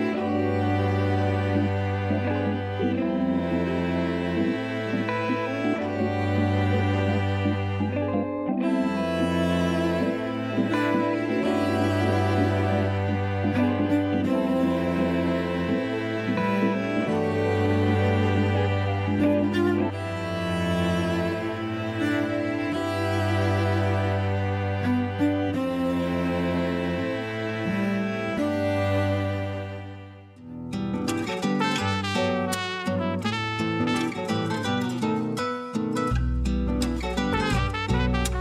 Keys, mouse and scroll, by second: 0.2 click, 3.5 click, 4.6 click, 5.7 click, 6.3 scroll down 1, 6.7 a, 6.9 a, 7.0 scroll up 1, 7.5-8.4 middle drag, 8.4-9.5 scroll up 1, 9.5 click, 10.5 click, 11.3-15.4 shift+middle drag, 15.8-16.3 shift+middle drag, 16.3-18.5 scroll up 1, 18.5 scroll up 1, 18.7 ctrl+3, 19.8-22.0 right drag, 22.0 click, 22.6 Tab, 23.1 a, 23.4 KP_1, 24.1 a, 24.2-24.7 scroll up 1, 24.7 ctrl+r, 25.8 a, 26.2 s, 29.2 a, 29.4 a, 29.9 click, 30.0 click, 30.4-30.8 scroll up 1, 30.8 ctrl+b, 32.6 scroll down 2, 32.8 a, 33.0 a, 33.4 Tab, 33.6-34.2 scroll up 2, 34.2-34.7 shift+middle drag, 34.7-35.2 scroll up 1, 35.2 click, 37.2 ctrl+3, 37.8-38.4 right drag.